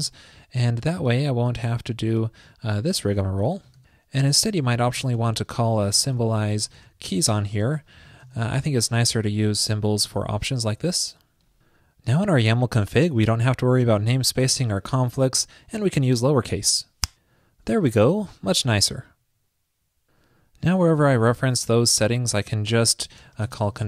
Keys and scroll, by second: 1.2 super+v, 1.3 super+v, 10.6 super+s.